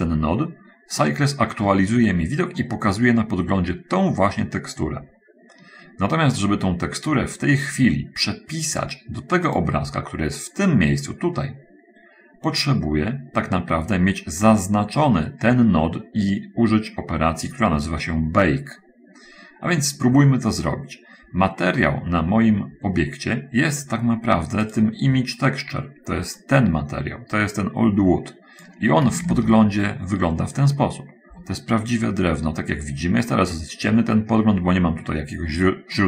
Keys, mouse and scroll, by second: 2.0 middle click, 2.9-4.1 middle drag, 9.9 click, 25.1 click, 26.8-29.2 drag, 29.7 shift+z, 31.5-32.9 middle drag, 35.9-36.0 middle drag.